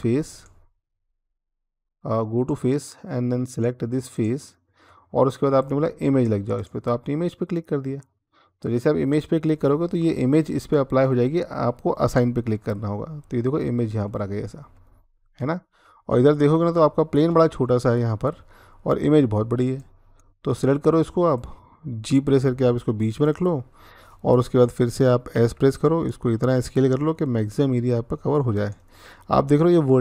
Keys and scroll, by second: 22.2 g, 25.1 s, 28.2 s.